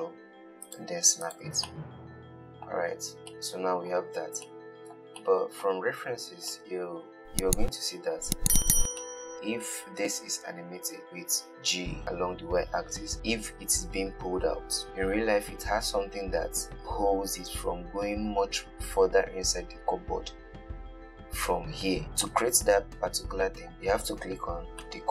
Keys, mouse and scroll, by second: 1.5 click, 1.9-3.2 middle drag, 3.2-3.6 scroll down 2, 3.6-8.9 middle drag, 8.9 click, 9.3-11.7 middle drag, 11.7 g, 22.0-23.7 middle drag, 23.7-25.1 scroll up 2.